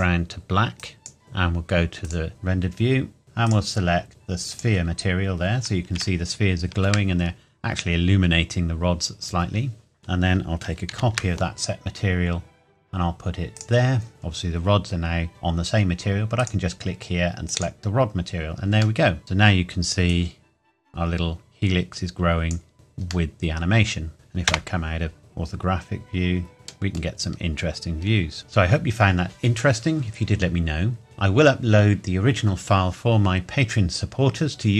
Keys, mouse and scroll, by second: 3.2 scroll up 1, 3.4 click, 6.2 shift+middle click, 7.2-9.1 scroll up 1, 10.0 click, 10.9 shift+d, 13.5 click, 16.4 click, 19.0 middle click, 19.2-20.1 scroll down 1, 20.1 click, 22.7-23.3 scroll up 1, 23.3 middle click, 24.4 KP_0, 25.2-25.7 scroll down 1, 26.5 middle click, 27.2-28.2 scroll up 1, 28.4-30.2 scroll down 1.